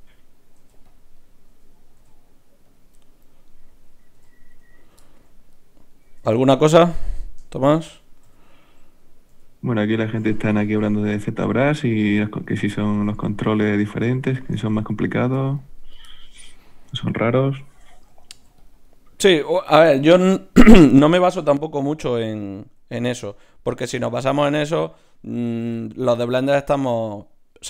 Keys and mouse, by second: 0.5 ctrl+r, 2.0 g, 3.4-7.4 drag, 4.2 g, 8.2 f, 9.3 f, 11.9 f, 15.8-18.3 drag, 16.7 g, 18.3 ctrl+r, 19.3-22.2 drag, 21.7 g, 22.7 g, 23.9 ctrl+Tab, 25.3 g, 26.5 g.